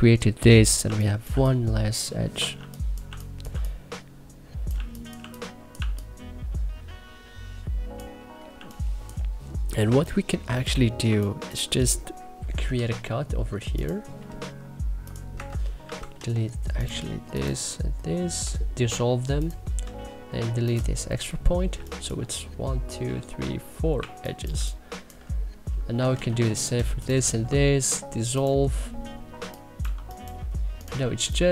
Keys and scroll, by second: 0.6 1, 1.1 3, 2.3 2, 3.3 3, 4.5 1, 5.0 2, 5.6 1, 8.3 2, 9.6 1, 12.3 k, 15.1 Escape, 15.6 c, 15.9 e, 19.6 w, 21.1 Delete, 21.5 3, 23.8 1, 24.3 3, 25.7 c, 26.1 e, 29.1 2, 29.6 1, 30.8 3.